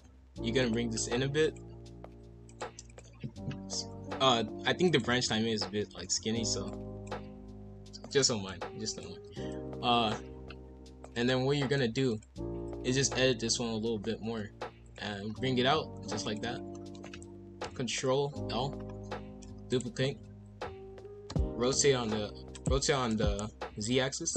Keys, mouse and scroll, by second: 0.0 g, 1.4 click, 2.0 b, 2.9 click, 4.0 v, 5.0 ctrl+z, 6.4 b, 7.2 g, 8.4 z, 9.2 b, 10.3 g, 12.0 click, 12.4 b, 13.3 g, 15.2 scroll down 2, 15.7 z, 16.7 middle click, 17.6 ctrl+l, 18.7-19.2 scroll up 2, 19.2 shift+d, 20.1 r, 22.8 r.